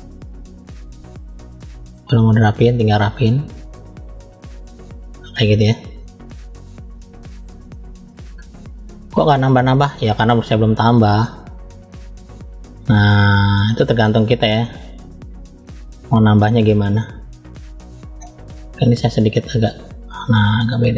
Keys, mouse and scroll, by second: 1.3 middle click, 2.5 click, 3.3 click, 5.6 middle click, 7.1-7.7 scroll down 2, 7.6 middle click, 8.6 scroll up 1, 9.2 click, 9.2 scroll up 1, 12.8 click, 13.2 middle click, 14.3 click, 16.0 click, 16.4-17.0 scroll down 3, 16.8 middle click, 17.7 scroll up 1, 18.5 click, 18.5-19.3 scroll up 2, 20.1 click.